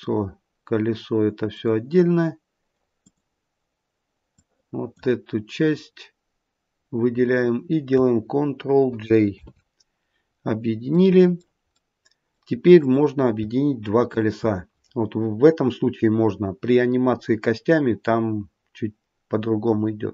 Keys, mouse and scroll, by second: 1.4 click, 3.0 click, 4.2 click, 9.3 ctrl+j, 10.9 middle click, 11.1 middle click, 11.7 middle click, 11.9 middle click, 12.8 click, 14.0 shift+click.